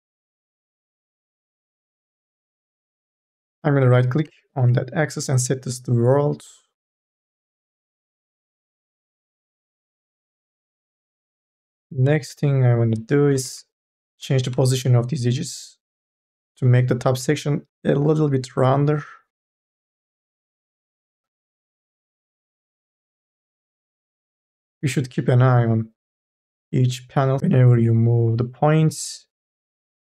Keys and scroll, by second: 1.1 1, 1.9 2, 8.1 1, 10.0 1, 11.5 2, 13.3 1, 13.9 2, 19.0 1, 21.5 2, 22.4 1, 29.5 2.